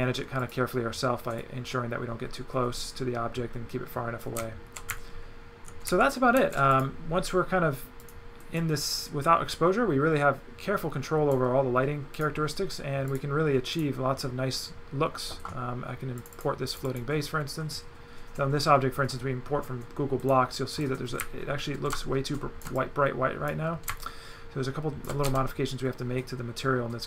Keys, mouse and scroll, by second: 0.4 click, 1.4 click, 4.4 right click, 6.7 click, 8.0 click, 8.6 click, 12.2 click, 13.1 click, 13.7 click, 16.2 click, 16.7 click, 20.3 click, 20.9 click, 22.8 click, 24.0 shift+click, 25.3 shift+right click.